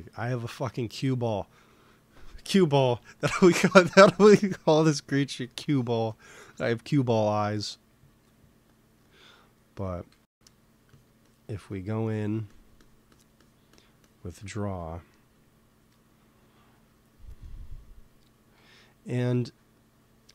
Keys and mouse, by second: 1.6 ctrl+s, 5.4 middle click, 7.3-10.5 drag, 10.0 x, 10.2 f, 10.8-12.1 drag, 14.1-15.9 drag, 16.1 middle click, 16.7 ctrl+z, 17.3-19.4 middle drag, 19.4-20.3 drag.